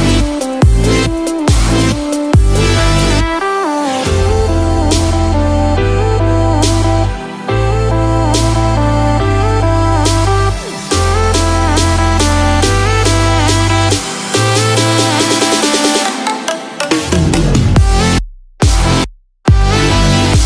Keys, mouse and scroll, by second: 0.4 scroll up 1, 2.0 shift+s, 5.1 middle click, 7.1 Tab, 8.5 click, 13.9 middle click, 14.9-15.3 scroll down 3, 15.2 middle click, 18.1 scroll down 2, 18.4 middle click.